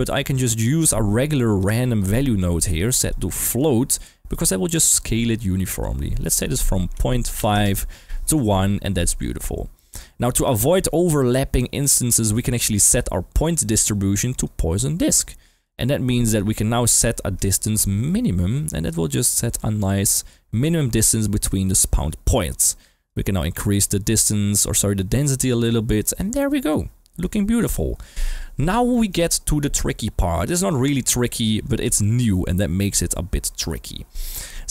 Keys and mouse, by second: 2.5 click, 3.0-3.5 drag, 4.3-4.9 drag, 5.6-7.5 drag, 9.9 middle click, 11.5 middle click, 12.5 middle click, 13.7-14.4 drag, 15.1 click, 16.3 click, 17.4-21.7 shift+drag, 23.0-25.9 drag, 26.2-26.6 middle drag, 27.3 KP_1, 28.9 middle click, 29.6-30.9 drag, 31.1 middle click, 31.6 click, 32.3 g, 32.9 click, 34.4 click.